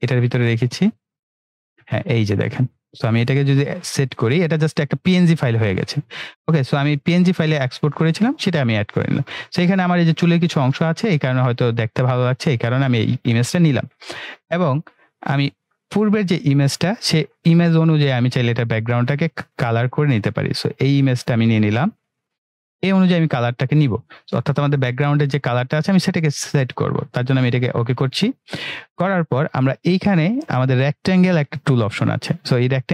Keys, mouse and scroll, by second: 15.1 click, 17.9-18.5 drag, 32.8-32.9 drag.